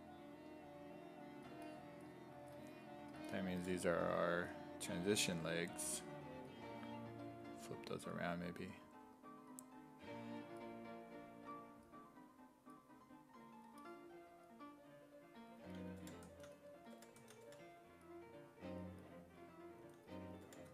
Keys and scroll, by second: 3.6 5, 4.4 w, 15.8-18.0 typing, 19.8-20.7 typing.